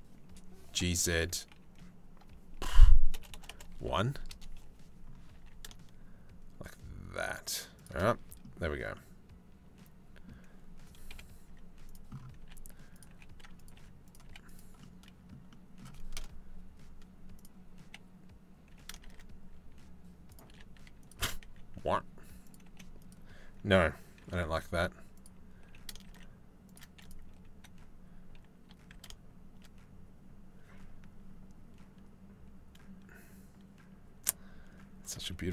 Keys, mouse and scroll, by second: 0.3 g, 4.9 g, 7.9 click, 8.5-9.8 drag, 10.7-13.8 typing, 15.7 KP_0, 18.3 g, 20.0 r, 20.8 r, 22.2 g, 23.8 r, 25.2 g, 28.2 r.